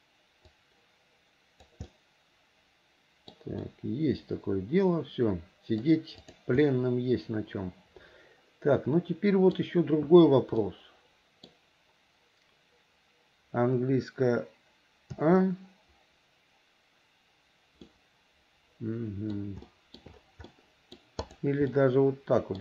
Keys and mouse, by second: 0.6 click, 0.9-1.9 drag, 2.1-3.6 middle drag, 3.7-6.0 middle drag, 6.3 click, 6.8-9.7 middle drag, 10.8 middle click, 15.3 a, 18.0-19.6 middle drag, 19.8 shift+middle click, 20.6 middle click, 21.4 click, 21.9-22.6 middle drag.